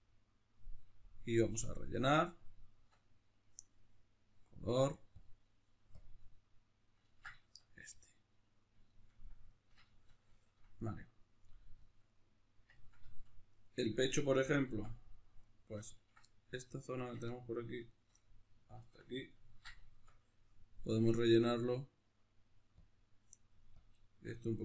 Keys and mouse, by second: 2.9 Tab, 5.2 click, 6.1 click, 6.5-13.5 middle drag, 13.5 right click, 13.9-15.4 middle drag, 14.8 Tab, 15.4 right click, 16.3 middle click, 16.9 ctrl+right click, 17.3 middle click, 17.9 shift+right click, 18.1 middle click, 18.8 ctrl+right click, 19.1-22.9 middle drag, 20.1 Tab, 22.9 click, 23.9 click, 24.1-24.6 middle drag, 24.5 a.